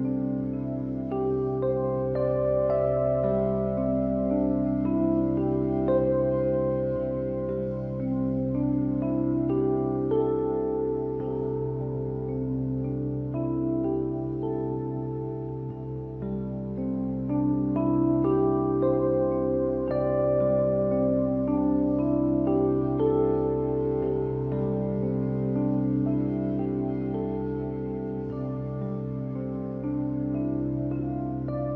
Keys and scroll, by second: 10.4-11.3 typing, 25.9 ctrl+y.